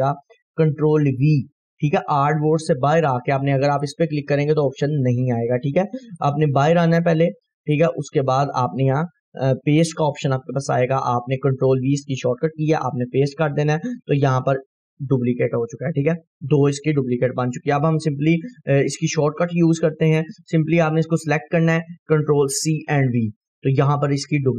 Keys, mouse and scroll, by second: 3.9 right click, 5.2 scroll down 1, 6.3 right click, 7.3 click, 7.8 right click, 13.1 click, 14.2 scroll up 1, 14.9-15.3 click, 18.0 Delete, 20.1 click, 22.6 ctrl+c, 23.9-24.5 drag.